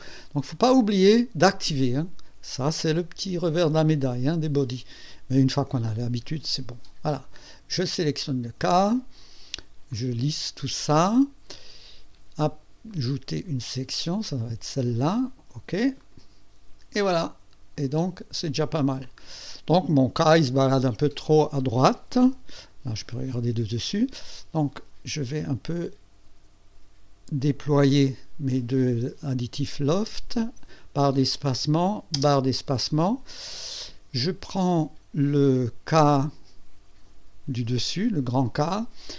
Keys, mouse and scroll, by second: 0.8 right click, 1.5 click, 3.6 click, 7.2 click, 9.9 click, 12.9 click, 14.3 click, 14.7 click, 16.0 click, 16.9 click, 18.4 scroll down 1, 19.0 click, 20.5 click, 22.2 KP_2, 25.4 click, 27.6 click, 28.1 scroll down 1, 29.3 click, 29.9 space, 31.5 click, 32.1 space, 32.6 space, 35.4 click.